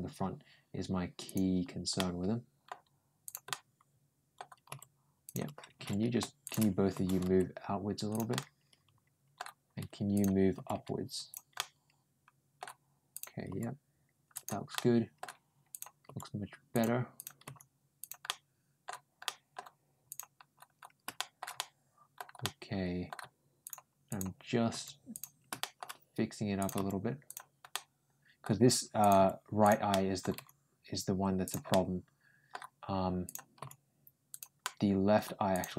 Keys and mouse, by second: 1.1 click, 1.8 middle click, 3.1 click, 3.3 middle click, 5.1 g, 6.3 click, 6.8 ctrl+g, 8.2-9.2 middle drag, 10.0 click, 10.4 g, 11.4-12.4 middle drag, 13.0 click, 14.2 g, 14.6 middle click, 15.5 click, 15.9 g, 17.0 click, 17.3 g, 18.1 middle click, 19.1 middle click, 19.9 click, 21.0 middle click, 21.4 middle click, 22.2 middle click, 23.5 click, 23.9 click, 24.5 g, 25.4 middle click, 26.4 click, 26.6 g, 27.5 middle click, 28.8 click, 29.0 g, 29.7 middle click, 30.2 g, 31.5 middle click, 33.1 click, 33.4 g, 34.4 middle click, 35.4 click, 35.5 g.